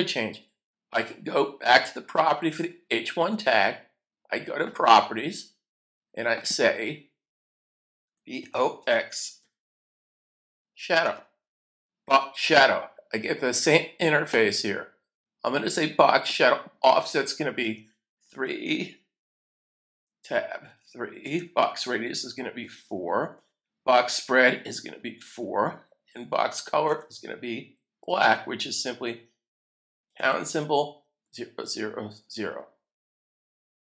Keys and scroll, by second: 7.9-10.6 typing, 11.0 Return, 12.0 typing, 17.6 3, 18.0 3, 19.9 Tab, 20.6 3, 22.0-22.6 typing, 24.0 4, 25.2 4, 26.9 Tab, 30.2-32.7 typing.